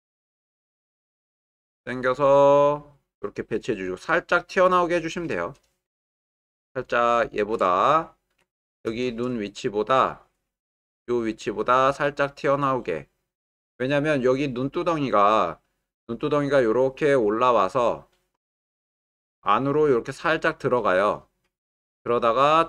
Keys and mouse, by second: 7.0 shift+middle click, 8.0 ctrl+middle click, 8.6 shift+middle click, 11.0 click, 12.4 click, 16.5-22.6 drag.